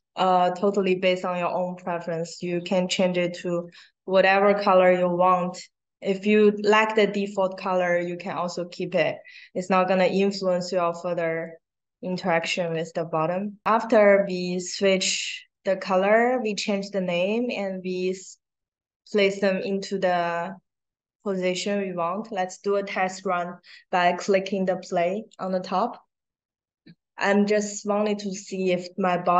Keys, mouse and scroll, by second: 1.2-1.8 drag, 2.2 click, 3.5 click, 5.4-5.9 drag, 6.3 click, 9.9-11.4 drag, 12.0 click, 13.6 click, 14.2 click, 14.7 click, 15.3 click, 17.5 scroll down 1, 19.2 click, 19.6-20.0 drag, 21.1 click, 25.2 click.